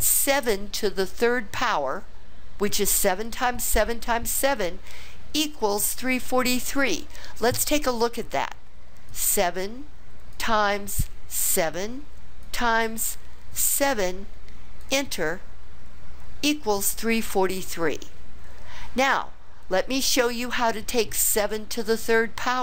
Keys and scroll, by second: 9.1 7, 10.3 *, 11.4 7, 12.5 *, 13.6 7, 14.8 Return.